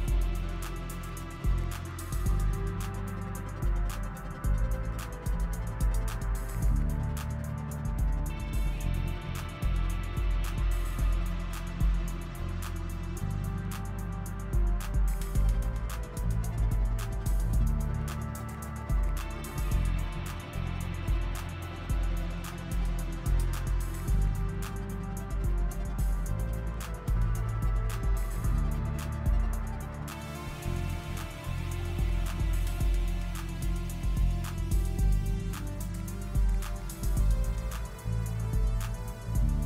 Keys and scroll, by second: 7.2 s.